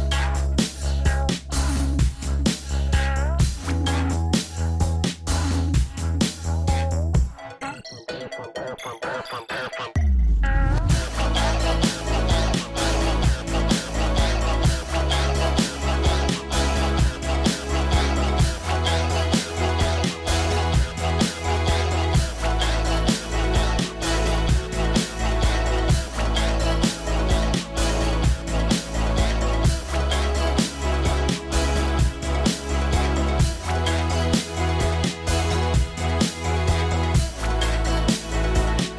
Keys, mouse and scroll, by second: 0.0 click, 2.4 scroll down 1, 5.9 scroll up 1, 18.6 scroll up 1, 18.7 scroll down 1, 19.4 scroll up 1, 20.8-22.1 scroll down 1, 25.9 scroll up 1, 26.9-28.8 scroll down 1, 28.9 scroll up 1, 29.0-29.5 scroll down 1, 29.6-31.5 scroll up 1, 35.4 scroll down 1.